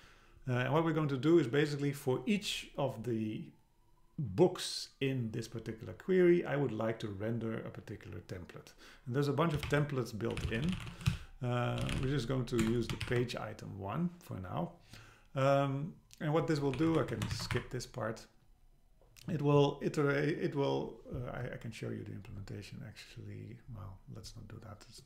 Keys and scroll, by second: 12.6 Return, 16.8 Up, 17.0 super+Left, 17.3 shift+Down, 17.6 Delete.